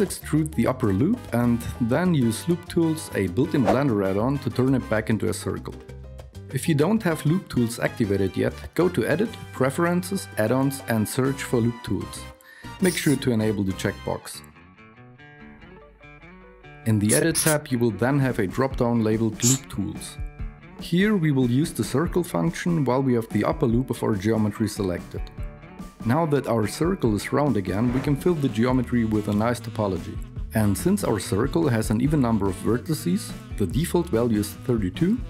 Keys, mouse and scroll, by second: 1.1 e, 3.2 n, 28.1 KP_7, 28.1 a.